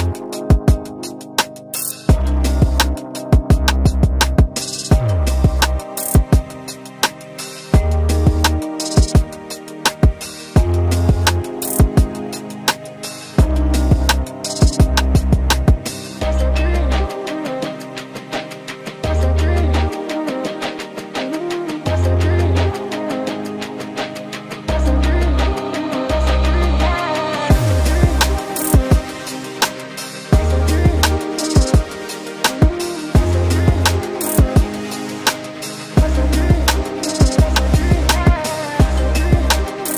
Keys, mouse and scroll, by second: 11.1 Delete.